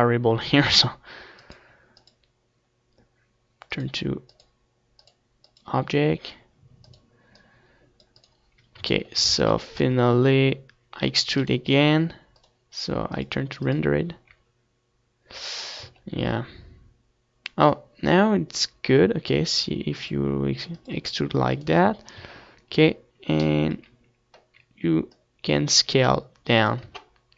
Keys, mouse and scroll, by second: 0.4 Tab, 1.3-6.5 drag, 6.7-8.6 drag, 8.6 Tab, 9.0 ctrl+z, 9.5 ctrl+z, 9.8 ctrl+z, 11.1 e, 11.4-13.4 right drag, 11.6 s, 12.4-14.5 drag, 16.2 Tab, 20.1-22.3 drag, 22.3 Tab, 23.6 middle click, 24.2 middle click, 25.2-27.0 drag, 27.1 Tab.